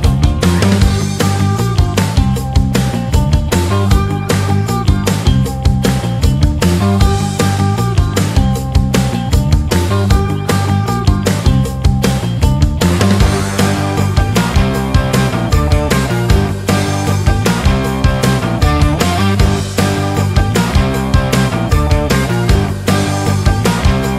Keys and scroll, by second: 8.2 shift+Page_Down, 9.0 shift+F2, 9.6 Escape, 13.9 w, 14.9 shift+F2.